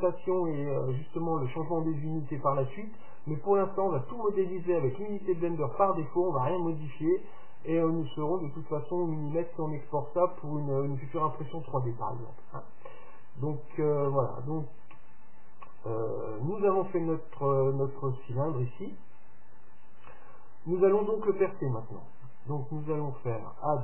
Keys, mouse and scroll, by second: 17.7-19.6 middle drag, 21.8 KP_7.